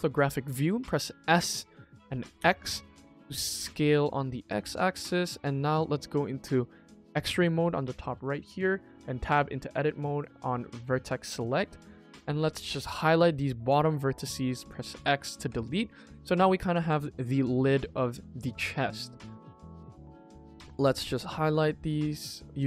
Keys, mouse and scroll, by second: 1.2 s, 4.9 middle click, 5.4 KP_1, 7.1 click, 7.9 shift+middle click, 8.9 Tab, 9.3 click, 10.1 click, 11.7-13.6 drag, 15.6-16.2 middle drag, 17.0-17.6 middle drag, 17.8-18.5 middle drag, 19.0 Tab, 19.2 middle click, 20.0 alt+click, 20.5 middle click, 21.0 alt+click, 22.5 click.